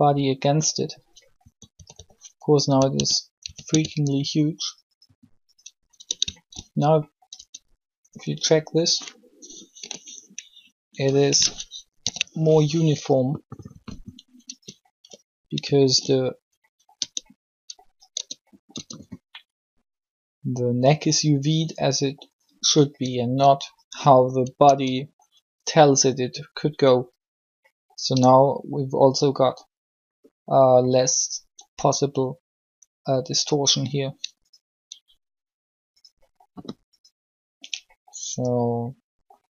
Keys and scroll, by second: 0.1 typing, 1.7-3.7 typing, 5.9 Tab, 7.3 Tab, 9.6 u, 12.0 ctrl+l, 13.7 r, 18.1 Tab, 18.7 Tab, 24.6 alt+shift+Tab.